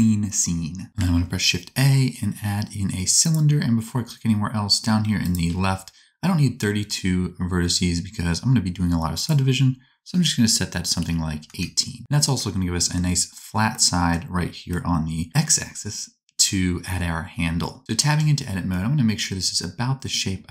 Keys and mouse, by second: 1.2 shift+a, 4.8 click, 4.8 right click, 5.3-20.5 drag, 18.1 Tab.